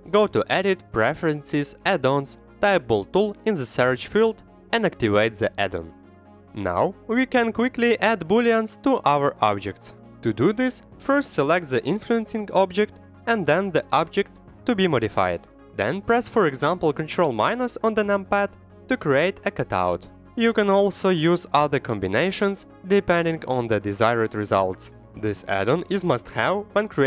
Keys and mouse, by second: 9.3 middle drag, 10.2 shift+a, 12.1 g, 12.6 click, 12.9 s, 13.6 click, 13.8 g, 14.7 drag, 15.8 click, 16.4 shift+click, 18.0 ctrl+KP_Subtract, 19.4 click, 19.8 middle drag, 20.3 g, 21.3 click, 21.3 right click, 21.6 s, 22.1 click, 22.4 g, 22.7-23.0 drag, 23.0 middle click, 23.4 shift+d, 24.3 click.